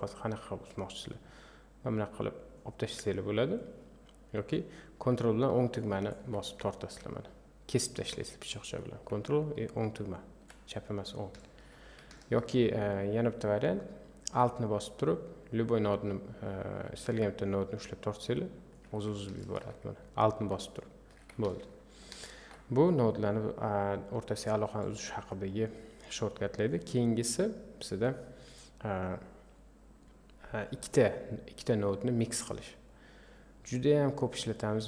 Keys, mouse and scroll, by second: 3.5 click, 6.0 ctrl+right click, 7.1 click, 10.4 ctrl+right click, 11.4 ctrl+click, 17.8 alt+click, 19.4 ctrl+shift+click, 20.6 alt+click, 21.5 ctrl+click, 26.0 click, 31.1-33.0 drag.